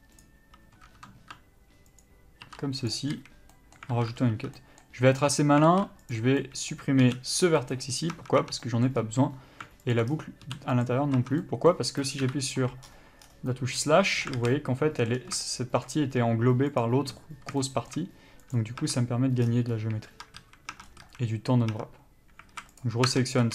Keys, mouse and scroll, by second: 2.2 ctrl+click, 3.1 ctrl+e, 3.3 a, 3.7 middle click, 4.1 alt+a, 4.5 1, 4.8 middle click, 5.3 click, 5.9 alt+z, 6.2 click, 6.6 middle click, 7.9 x, 8.3 Tab, 8.8 middle click, 9.2-10.1 scroll up 1, 10.1 alt+click, 10.3-11.0 scroll down 1, 11.0 x, 11.4 Tab, 11.6 middle click, 12.4 KP_Divide, 13.0 scroll up 1, 13.4 scroll down 1, 14.6 alt+a, 14.7 middle click, 15.3 scroll down 1, 15.6 shift+middle click, 16.2-17.0 scroll up 1, 17.0 click, 17.8 shift+middle click, 18.7 click, 19.0 Tab, 19.1-19.5 scroll up 1, 19.6-20.4 scroll down 1, 20.4 Tab, 20.6 a, 21.2 scroll up 1, 21.2 a, 22.2 Tab, 22.7 alt+a, 23.0 click, 23.3 Tab.